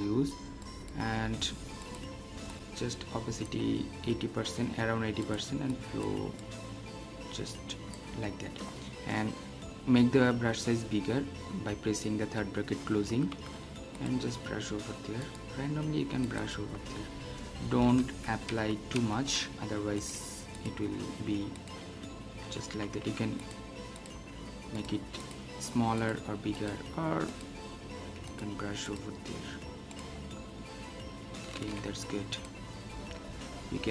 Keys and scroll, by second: 18.0 ctrl+alt+z, 31.6 ctrl+alt+z.